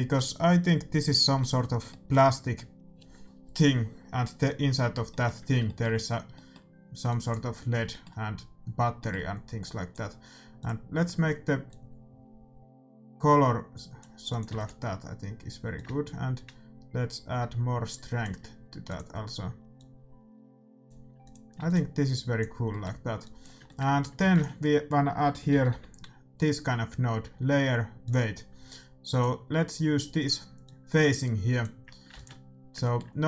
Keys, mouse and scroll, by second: 7.0-8.9 drag, 9.0-12.1 middle drag, 9.6-12.4 drag, 14.3-17.4 drag, 14.5 ctrl+s, 18.8-21.5 drag, 21.5 ctrl+s, 22.0-25.1 drag, 22.6-26.4 middle drag, 24.2 shift+a, 30.6-32.4 drag, 32.1 ctrl+s, 32.8-33.2 middle drag.